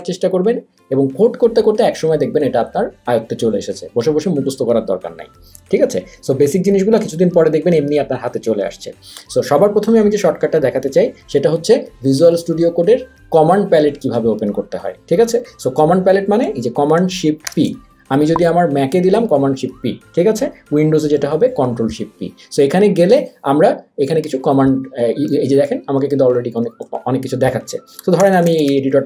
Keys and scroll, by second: 17.5 shift+super+p, 28.0-29.0 typing.